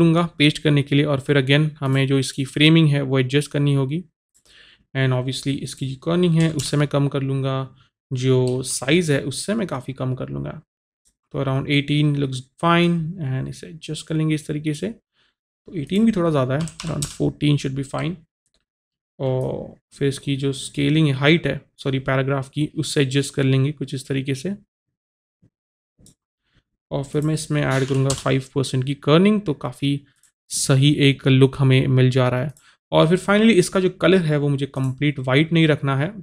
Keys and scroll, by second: 16.8 KP_1, 16.8 KP_4, 17.1 Return, 27.9 KP_5, 28.1 Return.